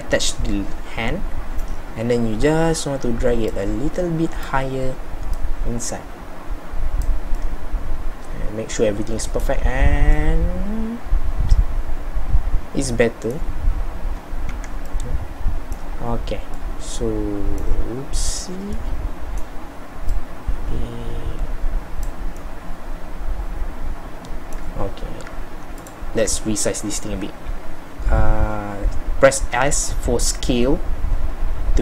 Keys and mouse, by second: 0.6 middle click, 1.1 middle click, 1.5 middle click, 14.6 z, 16.2-18.9 middle drag, 22.7-24.0 middle drag, 24.4-31.8 middle drag.